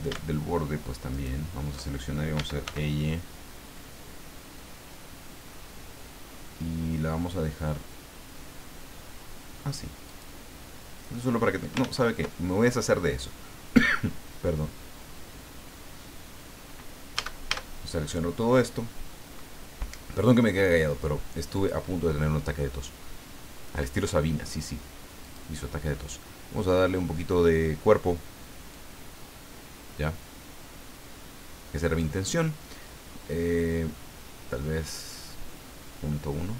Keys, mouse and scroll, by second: 1.1 alt+shift+right click, 2.3 e, 2.6 y, 10.1 click, 10.5 scroll down 2, 11.1 middle click, 11.8 ctrl+z, 17.1 a, 21.5 click, 25.2 click, 28.7-32.1 drag, 33.3-36.5 drag.